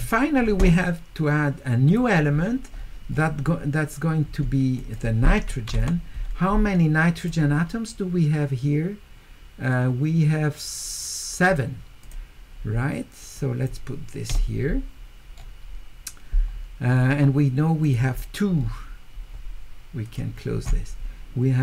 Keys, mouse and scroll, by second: 0.0 middle click, 1.9 click, 2.8 middle click, 2.8-3.3 scroll up 4, 3.1 middle click, 4.8 click, 7.2 click, 12.0 click, 13.4 click, 15.4 middle click, 17.8 click, 18.6 middle click, 18.6-19.2 scroll up 2, 20.0 click.